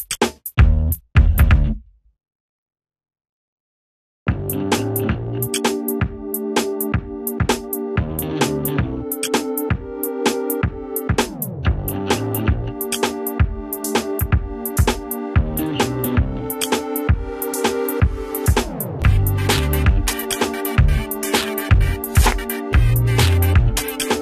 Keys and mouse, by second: 2.0 Left, 2.3 Down, 2.6 Left, 4.6 right click, 5.4 click, 5.6 right click, 6.6-10.8 drag, 18.2 ctrl+space, 18.8 click, 19.5 right click, 20.2-23.8 drag, 23.8 right click.